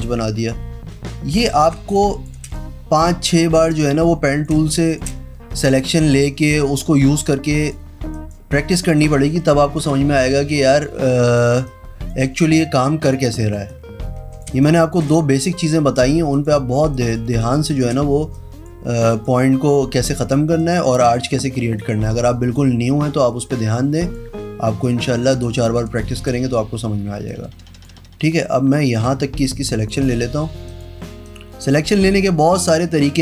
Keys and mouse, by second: 1.9 space, 2.1 click, 3.5-4.6 drag, 4.7 space, 4.8 click, 5.9 click, 6.9 click, 7.6 click, 8.3 click, 9.0 click, 9.9 click, 10.7 click, 11.7 space, 11.8 click, 13.9 click, 14.7 space, 14.8 click, 15.7 click, 16.5 click, 17.1 click, 17.5 space, 17.8 click, 18.5 click, 19.2 click, 20.7 click, 21.9 click, 24.1 click, 25.7 space, 29.1 click, 30.9 alt+click, 31.4 click, 33.0 click.